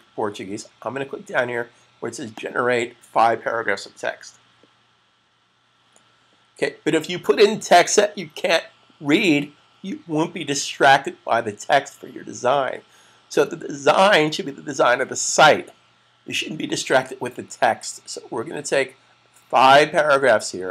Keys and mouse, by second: 2.1 click.